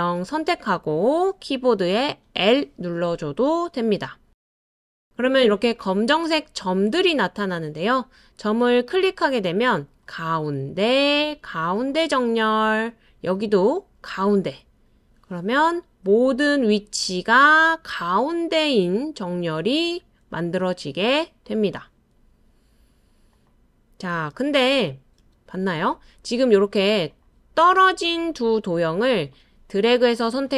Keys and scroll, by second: 2.4 l, 24.3 super+z, 24.8 super+z, 25.2 super+z.